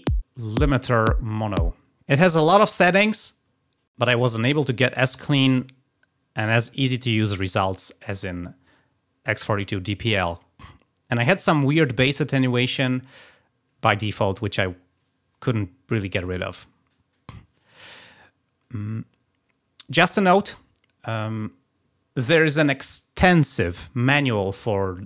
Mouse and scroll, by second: 0.6 click.